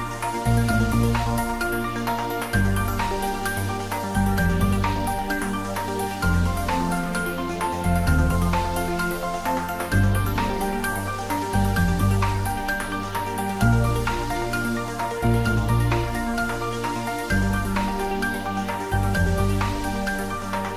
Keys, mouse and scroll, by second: 1.7 click, 4.6-9.6 drag, 9.6-11.1 scroll up 1, 12.3-13.1 scroll up 1, 13.1 click, 17.2 click.